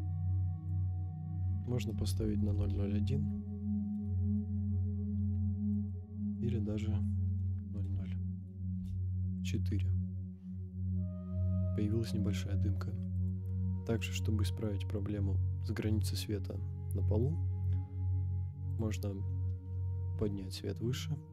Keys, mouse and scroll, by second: 0.8-3.9 drag, 2.5 KP_0, 5.7-8.9 drag, 10.4 scroll up 2, 10.9 scroll down 1, 11.0 scroll down 1, 13.1 click, 14.0-16.9 middle drag, 17.4 scroll up 2, 18.7 click, 20.1 g, 20.2 z.